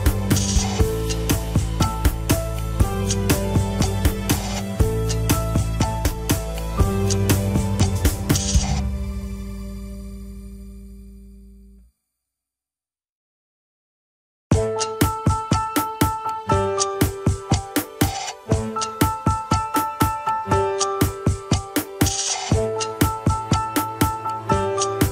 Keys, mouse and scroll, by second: 0.6-1.2 scroll down 3, 1.2 click, 1.6 scroll up 2, 1.8-3.0 shift+middle drag, 3.0 click, 4.0 shift+click, 4.4-4.8 scroll down 2, 4.8 shift+click, 5.6 shift+n, 6.7-7.4 scroll up 3, 7.0 shift+middle click, 7.7 click, 8.0-8.3 scroll up 1, 8.5 s, 9.3 KP_1, 9.4 scroll down 4, 9.8-12.0 shift+middle drag, 12.0 click, 12.2 alt+z, 12.7 click, 13.5 alt+z, 13.7 middle click, 14.6 KP_1, 15.3 click, 16.9 alt+z, 17.4 alt+z, 18.1 g, 19.9 scroll down 5, 20.4 shift+middle click, 20.7-21.8 scroll up 3, 21.8 click, 22.2 shift+click, 23.3 ctrl+s.